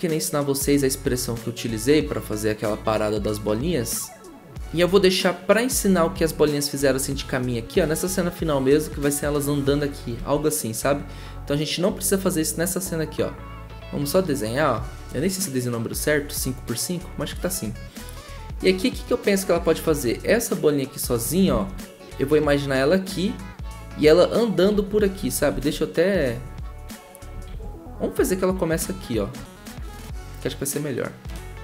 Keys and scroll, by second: 10.1 ctrl+z, 21.5 ctrl+z, 24.7 ctrl+z, 25.5 ctrl+z, 27.5 ctrl+z.